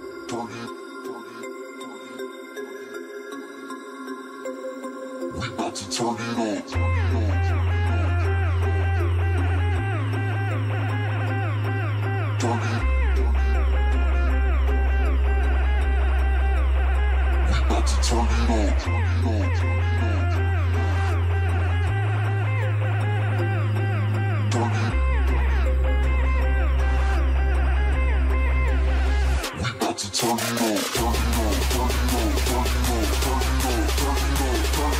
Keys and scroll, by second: 3.3 ctrl+shift+space, 5.7 ctrl+shift+space, 6.6 s, 8.7 ctrl+shift+space, 9.5 ctrl+shift+space.